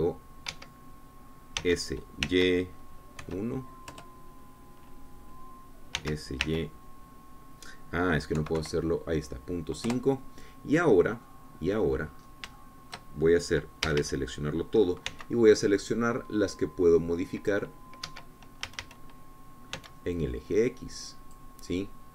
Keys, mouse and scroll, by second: 2.0 Escape, 3.1 s, 3.7 y, 4.7 KP_1, 5.4 KP_Enter, 7.4 s, 7.9 y, 9.8 KP_Decimal, 10.1 KP_5, 11.3 KP_Enter, 12.7 click, 14.0 shift+click, 15.3 a, 16.6 c, 17.4-19.2 drag, 19.5 Escape, 20.1 a, 21.6-22.1 drag, 21.6 c.